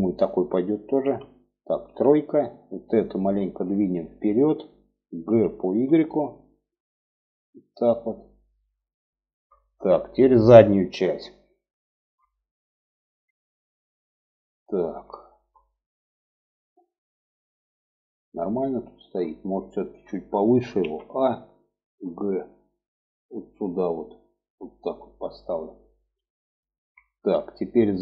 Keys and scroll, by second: 0.4 2, 1.2 3, 4.6 g, 20.1 a, 21.2 g.